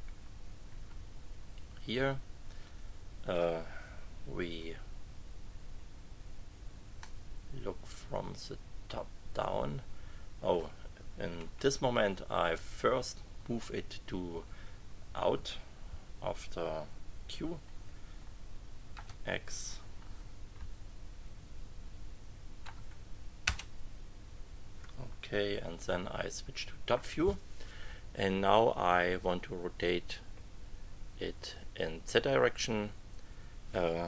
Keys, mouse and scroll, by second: 2.6 click, 4.6 KP_2, 7.0-10.0 middle drag, 10.0 click, 11.4 KP_1, 18.9 x, 20.5 Page_Up, 25.8 KP_2.